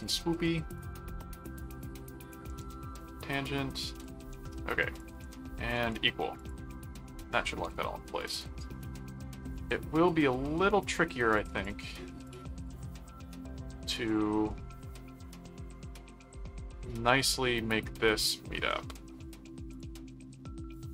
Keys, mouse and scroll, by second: 0.8 ctrl+click, 2.6 alt+a, 3.0 click, 4.0 ctrl+click, 5.0 ctrl+alt+click, 5.7 alt+q, 6.4 click, 8.8-10.6 middle drag, 11.0 middle click, 11.4 ctrl+click, 12.7 ctrl+click, 14.1 click, 15.6 ctrl+4, 19.7 click, 20.7 click.